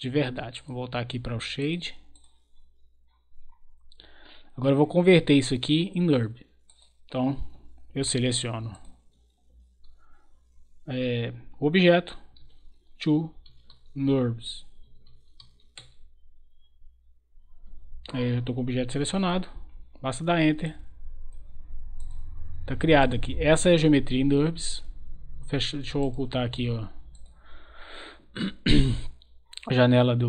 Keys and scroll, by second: 12.1-15.8 typing, 19.1 Return.